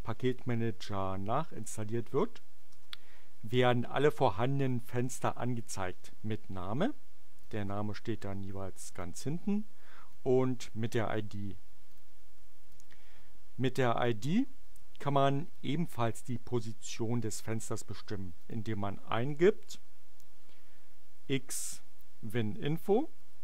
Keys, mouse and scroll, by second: 2.7 Return, 7.3 click, 9.0-10.2 drag, 11.8 click, 12.6-14.0 drag, 18.3 click, 21.1-23.4 typing.